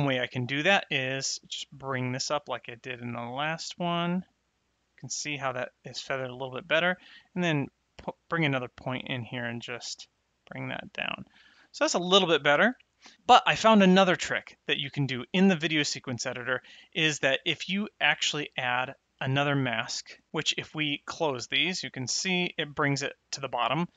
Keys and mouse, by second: 0.0 click, 2.0 click, 4.1 click, 7.0 click, 9.0 click, 11.5 middle click, 18.2 click, 19.5 click, 20.9 click.